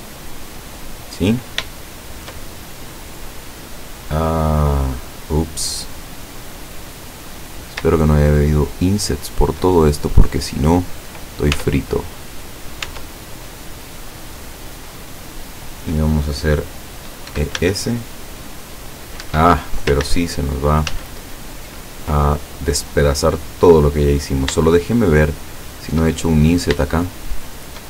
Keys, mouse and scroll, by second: 0.2 click, 1.1-1.5 scroll down 2, 1.8 shift+middle click, 2.6-3.2 shift+scroll down 1, 3.5-6.5 middle drag, 6.8-7.6 scroll up 1, 8.1-9.5 shift+middle drag, 10.0 shift+scroll up 2, 10.8 scroll down 2, 11.6 Tab, 12.9 Tab, 13.7 middle click, 14.8-15.3 scroll up 2, 17.3 e, 17.6 s, 19.3 Escape, 20.1 ctrl+z, 21.0 ctrl+z, 24.2-24.7 scroll up 3, 26.3-26.9 shift+scroll up 4, 26.9 shift+middle click.